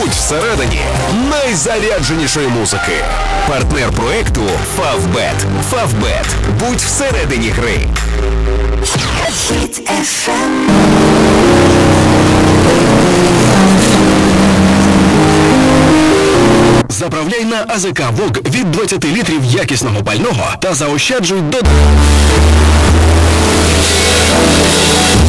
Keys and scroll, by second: 0.3 Down, 0.3 Return, 16.8 Page_Down.